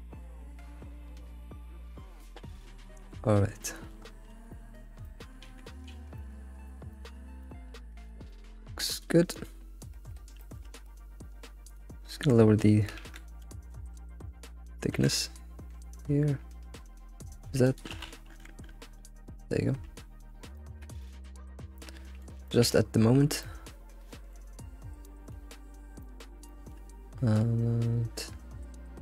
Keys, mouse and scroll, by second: 3.0 shift+middle click, 3.4 scroll down 1, 3.6 middle click, 4.0 scroll up 3, 4.5 middle click, 5.4 alt+shift+z, 5.9 alt+shift+z, 6.1-7.4 shift+middle drag, 7.4 click, 7.8 Tab, 8.0 click, 8.3-8.7 middle drag, 8.7 Tab, 8.9 click, 9.3-11.7 middle drag, 11.7-14.7 drag, 19.4-20.9 middle drag, 21.0-22.9 middle drag, 22.9-23.5 scroll up 6, 23.5-24.8 middle drag, 24.8-25.1 scroll down 3, 25.1-25.6 middle drag, 25.6-26.0 scroll down 3, 26.0-27.4 middle drag, 27.4-29.0 scroll down 2.